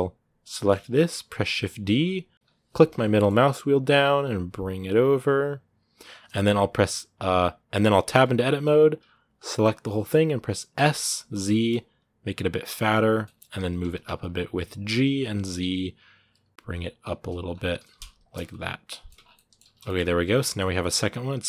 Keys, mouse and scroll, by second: 0.2 scroll down 2, 0.3 middle click, 0.6-1.1 scroll up 1, 1.1 shift+d, 13.0 middle click, 13.3 g, 17.2 scroll up 1, 17.5 g, 18.2 middle click, 18.9 Tab, 19.0 scroll down 1, 19.1 middle click, 19.4 a, 19.5 scroll down 1, 19.6-21.4 shift+middle drag.